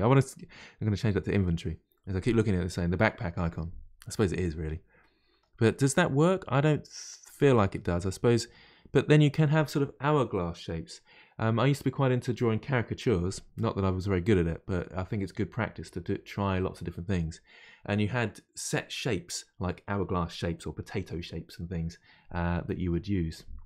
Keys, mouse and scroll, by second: 1.9-8.7 middle drag.